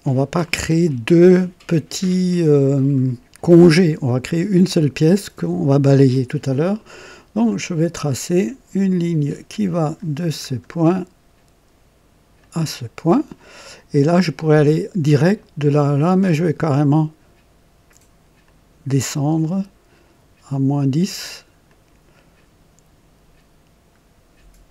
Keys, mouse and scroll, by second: 7.3 click, 9.6 click, 10.3 scroll up 2, 12.3 click, 18.4 click, 21.6 click.